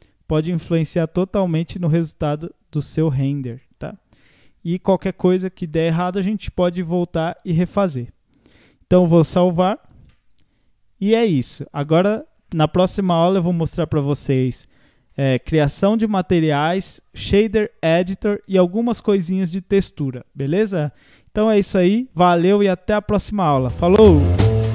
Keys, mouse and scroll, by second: 1.0 click, 1.5 middle drag, 1.7-2.5 scroll up 11, 2.7 scroll down 1, 2.9-6.7 middle drag, 6.7-9.7 drag, 10.0 ctrl+s.